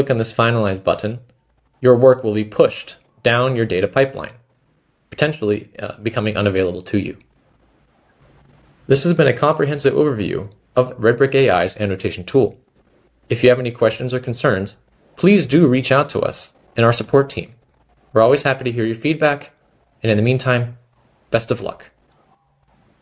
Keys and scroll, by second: 1.9-2.6 typing, 20.4-23.0 typing.